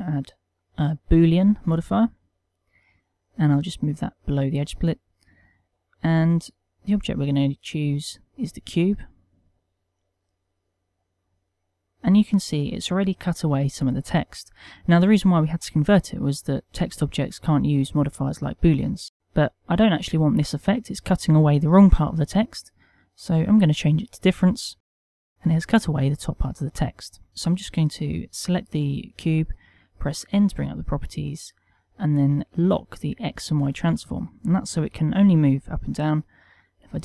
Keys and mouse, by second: 3.4 click, 6.8 click, 9.2 click, 10.2 click, 23.1 click, 29.1 n, 30.3 middle click, 32.8 click, 33.4 click, 33.9 n, 36.4 g.